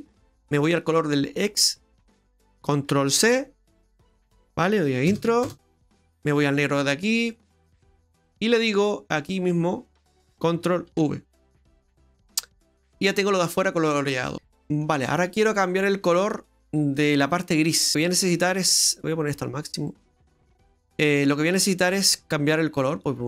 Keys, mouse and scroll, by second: 7.1 click, 8.0 click, 14.1 scroll down 1, 14.3 middle click, 15.9 middle click, 17.9 middle click, 17.9 scroll down 9, 18.0 middle click, 19.3 click, 20.2 middle click, 20.7-21.6 scroll up 12.